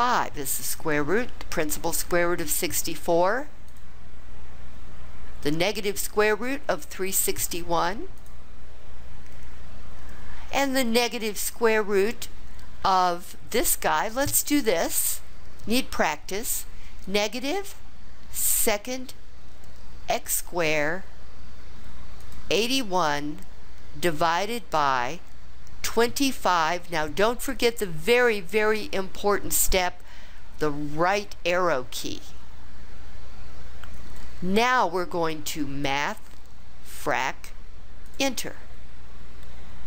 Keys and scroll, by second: 22.2 8, 22.9 1, 24.2 /, 25.8 2, 26.5 5, 31.0 ), 36.9 Return, 38.0 Return.